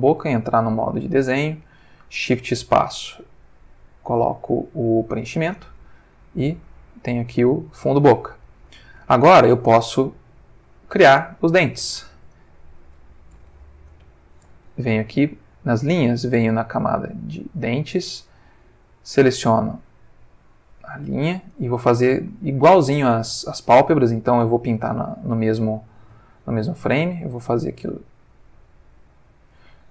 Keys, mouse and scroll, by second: 0.2 ctrl+Tab, 1.0 click, 2.1 shift+space, 5.1 click, 6.5 click, 7.8-8.8 ctrl+middle drag, 10.9 click, 12.3 click, 13.5 ctrl+z, 14.0 ctrl+Escape, 15.2 click, 16.7 click, 17.9 click, 19.4 click, 20.5 click, 21.5-24.9 shift+drag, 26.9-29.6 drag.